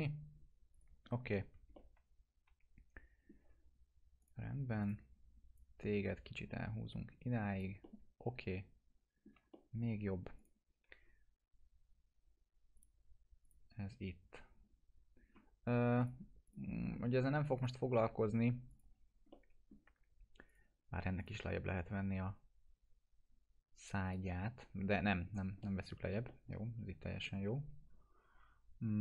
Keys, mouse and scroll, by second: 1.7-3.3 alt+middle drag, 4.2-6.9 drag, 7.8-9.3 alt+middle drag, 9.5 middle click, 10.3 click, 12.7 click, 16.0 click, 17.7 F4, 18.7 click, 18.9-19.2 scroll down 1, 19.3-19.9 alt+middle click, 20.4 click, 24.0 click, 24.9 ctrl+z, 25.2-25.5 scroll up 1, 25.6-26.2 alt+middle drag, 27.2 F4.